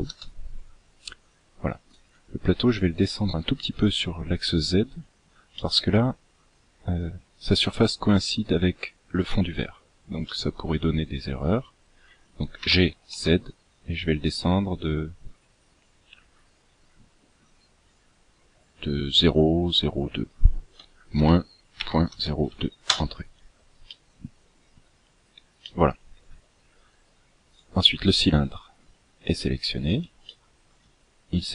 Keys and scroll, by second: 12.5 g.